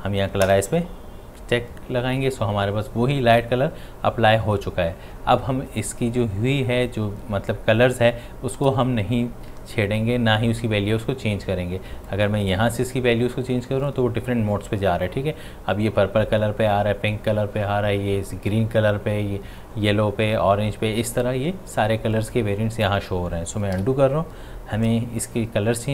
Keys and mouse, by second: 12.1-22.1 drag, 23.8 ctrl+z.